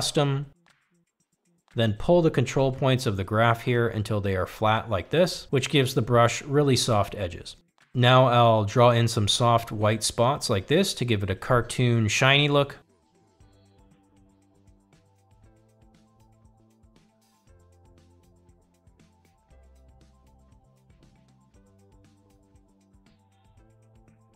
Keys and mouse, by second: 0.1-5.9 drag, 9.0-10.7 drag, 13.9 shift+middle click, 14.5 f, 15.2 click, 16.9 click, 20.5 click, 24.1 click.